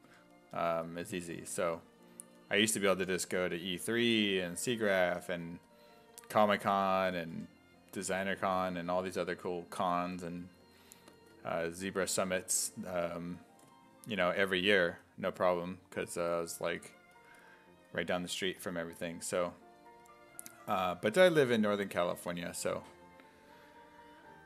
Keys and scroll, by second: 0.0-1.8 typing, 3.1 1, 6.5-7.9 typing, 10.6 1, 12.1 s, 12.5 4, 15.4 s, 16.2 s, 16.5 1, 20.3 s.